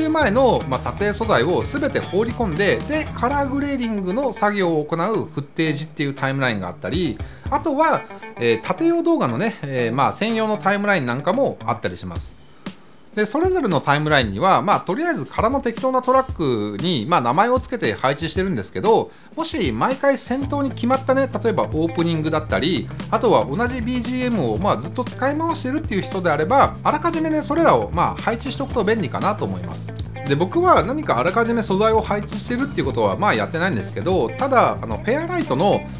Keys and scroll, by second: 16.6 Return, 21.2 super+a.